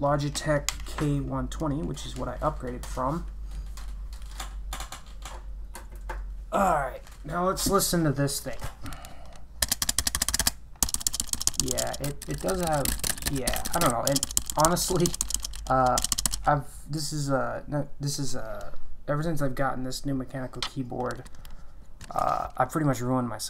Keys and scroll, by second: 10.0-16.8 typing.